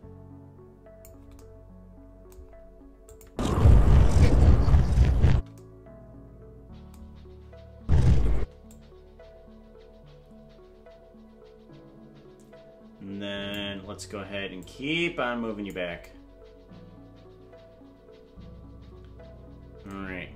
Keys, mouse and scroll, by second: 3.1 click, 3.3 space, 5.4 space, 7.8 space, 8.4 space, 8.7-13.6 drag, 14.6-15.8 drag.